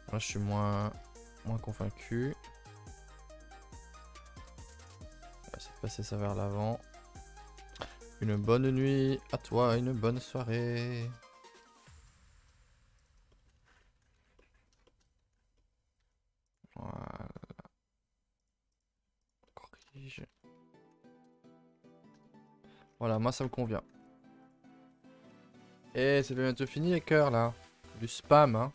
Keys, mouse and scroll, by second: 0.6 click, 1.2 1, 2.3 shift+click, 2.6 shift+click, 3.4 shift+click, 3.7 s, 4.3 g, 5.2 middle click, 5.8 click, 5.9 g, 7.0-8.2 shift+middle drag, 8.2 a, 8.3 a, 8.4-10.3 middle drag, 10.3 click, 11.0 click, 11.5 middle click, 11.7 Tab, 12.1 ctrl+middle click, 12.9 click, 13.2 shift+middle click, 13.5 a, 13.7 a, 13.7-15.0 middle drag, 15.0-15.5 scroll up 1, 15.5-15.9 middle drag, 15.9 Tab, 16.5 click, 16.8 g, 18.7 click, 18.8 g, 19.4-20.3 middle drag, 20.3 Tab, 20.5 a, 20.6 a, 20.6-21.2 scroll down 1, 21.2 KP_0, 21.9 scroll down 1, 22.2 shift+middle click, 22.5 scroll up 5, 22.8 scroll down 3, 23.1 a, 23.2 a, 24.5 click, 24.8 h, 25.5 shift+middle click, 25.8 a, 26.0 a, 26.8 shift+middle drag, 27.0 scroll up 2, 27.2 a, 27.4 a, 28.0 click.